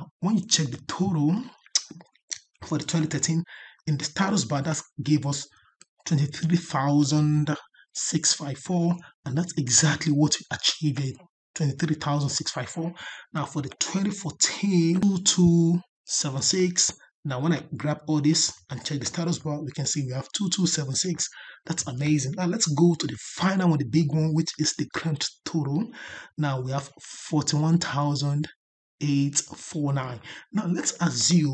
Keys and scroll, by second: 22.4 ctrl+Down.